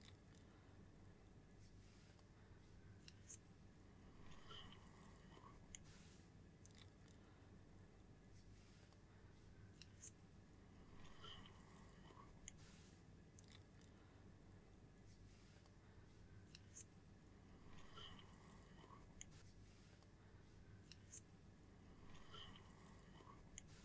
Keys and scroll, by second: 0.0 super+x, 0.7 super+v, 2.9 super+x, 4.9 super+v, 6.5 super+x, 8.3 super+v, 13.8 super+c, 15.2 super+v, 17.4 super+z, 17.7 super+v, 18.2 super+space, 21.1 super+c, 21.8 super+v, 23.5 super+space.